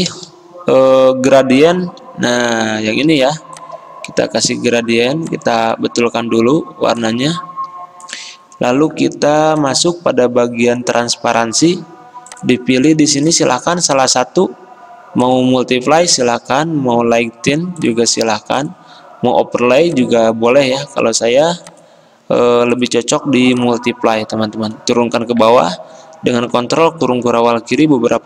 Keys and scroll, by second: 3.2 i, 3.2 g, 11.8 v, 18.0 v, 27.2 ctrl+[, 27.6 ctrl+[, 27.9 ctrl+[.